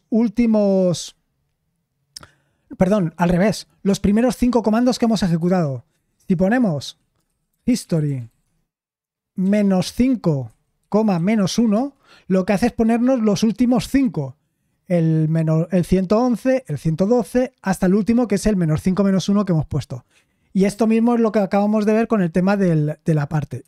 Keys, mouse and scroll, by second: 5.9-8.7 typing, 6.8 Escape, 11.7 Return, 11.7 typing.